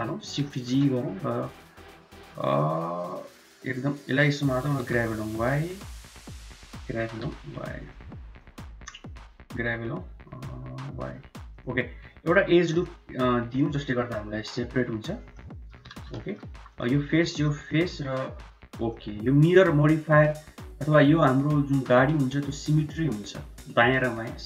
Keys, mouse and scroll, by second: 0.3 shift+z, 0.8 1, 3.6 click, 4.6 g, 6.2 click, 6.9 g, 8.4 click, 9.5 g, 12.2 ctrl+r, 15.2 click, 15.2 right click, 15.8 shift+z, 16.0 click, 16.3 3, 17.0 shift+click, 17.3 click, 18.7 click.